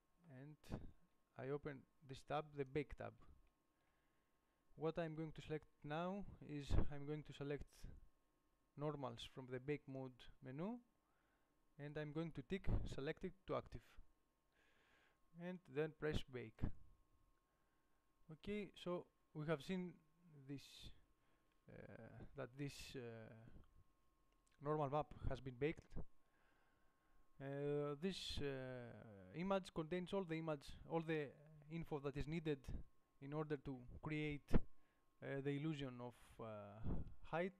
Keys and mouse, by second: 13.9-19.2 drag.